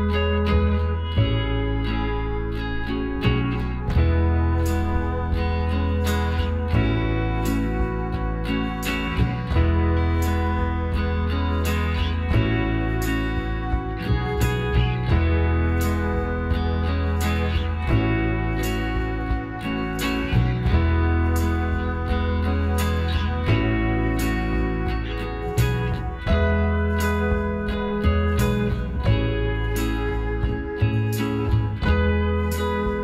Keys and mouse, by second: 1.3 right click, 1.3 x, 3.3-8.8 middle drag, 8.8-10.4 drag, 9.4-13.7 right drag, 11.0 f, 13.4 f, 13.7-15.0 middle drag, 16.3 middle click, 16.3-19.1 right drag, 18.5 f, 19.1 middle click, 19.4 Tab, 22.1 a, 24.9 middle click, 25.2 click.